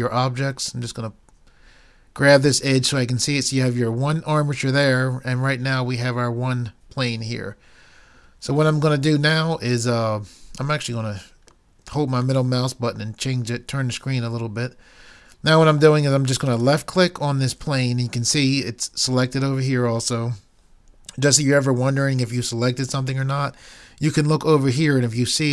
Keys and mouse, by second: 0.1-1.9 drag, 10.8 middle click.